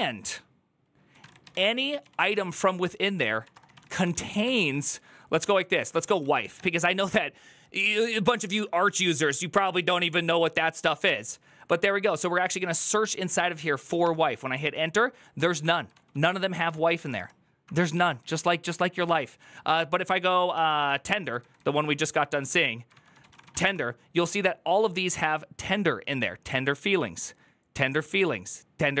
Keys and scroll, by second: 0.0-6.8 typing, 8.3-9.1 typing, 15.4 Up, 15.7 ctrl+w, 15.9 ctrl+w, 16.3 BackSpace, 16.5 BackSpace, 16.9 Return, 17.5 Up, 17.8 ctrl+Left, 18.0 ctrl+Left, 18.6 Right, 18.7 Right, 18.9 Right, 19.0 Right, 19.5 ctrl+t, 20.3 ctrl+c, 20.4 ctrl+c, 20.6 Up, 21.2 ctrl+Left, 21.4 ctrl+Left, 21.9 Right, 22.1 Right, 22.2 Right, 22.3 Right, 22.7-23.8 typing.